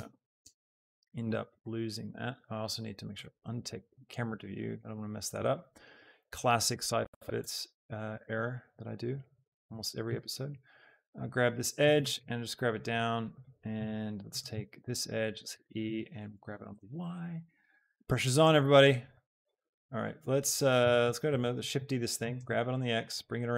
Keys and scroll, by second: 7.6 Tab, 10.1 Escape, 12.0 alt+z, 13.8 Tab, 14.5 Tab, 15.3 e, 15.6 Escape, 16.4 g, 16.7 y, 19.7 a, 20.8 Tab, 21.5 shift+d, 21.9 Escape, 22.2 x.